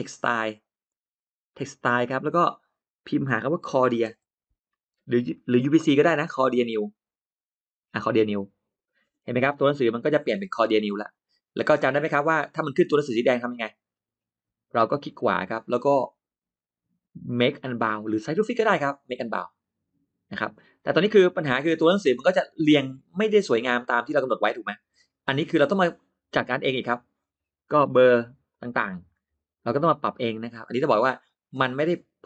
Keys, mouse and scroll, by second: 0.7 click, 2.8 click, 4.0 c, 4.3 o, 4.5 r, 8.0 click, 9.4-10.1 scroll up 1, 10.7-11.0 scroll down 1, 11.6-12.0 scroll down 1, 12.4-12.7 scroll up 1, 12.9 middle click, 13.7 middle click, 14.6 middle click, 14.6 scroll up 4, 15.4 right click, 19.1 click, 20.2 click, 20.5 middle click, 20.7 scroll down 1, 21.6-22.4 scroll up 2, 22.4 scroll down 1, 23.0 scroll down 1, 23.2 middle click, 24.0 click, 24.8 scroll down 1, 25.0 middle click, 25.1 click, 25.5 click, 26.6-26.9 scroll up 1, 28.4 click, 30.6 click, 31.5 click, 32.1 middle click.